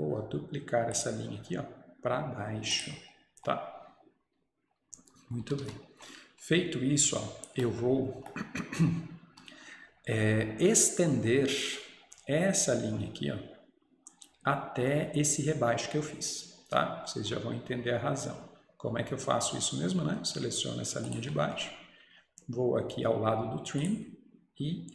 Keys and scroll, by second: 5.5 Escape, 5.7 Escape.